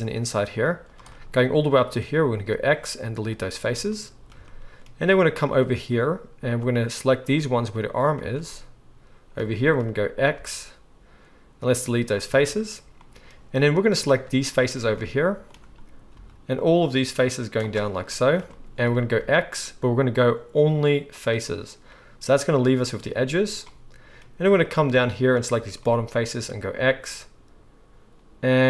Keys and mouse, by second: 0.0 shift+middle click, 0.1 shift+right click, 0.4 shift+middle click, 0.6-3.6 shift+right drag, 2.5 x, 3.6 click, 3.9-17.8 right drag, 5.4 click, 5.4 middle click, 7.2 shift+click, 7.2 shift+middle click, 7.6 shift+click, 7.6 shift+middle click, 8.0 shift+click, 8.0 shift+middle click, 10.3 x, 16.1 c, 17.8-24.6 middle drag, 19.2 x, 24.6 click, 24.7 shift+middle click, 25.4 ctrl+shift+click, 25.5-28.6 shift+middle drag, 26.7 x.